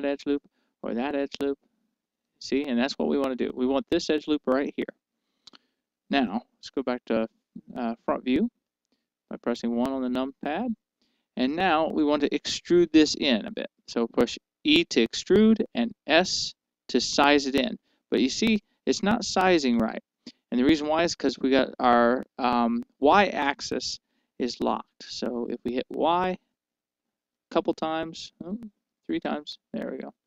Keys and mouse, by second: 8.1 KP_1, 10.1-12.0 middle drag, 15.6 e.